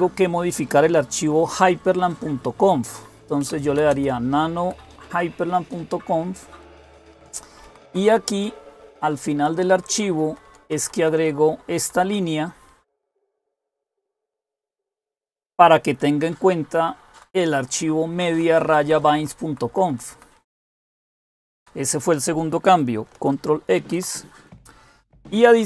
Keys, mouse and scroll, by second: 3.0-5.1 typing, 6.7-9.3 typing, 9.4 Page_Down, 9.6 Page_Down, 9.9 Page_Down, 10.4 Page_Down, 10.6 Page_Down, 11.4-13.0 typing, 13.1 Right, 13.2 Right, 14.0 Right, 14.2 Right, 14.5 Right, 15.1 Right, 15.2 Right, 15.8-17.0 Right, 16.5 Up, 17.9 Right, 18.3 Right, 18.5 Right, 18.6 Right, 18.8 Right, 19.0 Right, 19.2 Right, 19.7 Right, 19.9 Right, 20.8 Right, 20.8 Down, 21.0 Down, 21.2 Down, 21.4 Down, 23.6 ctrl+x.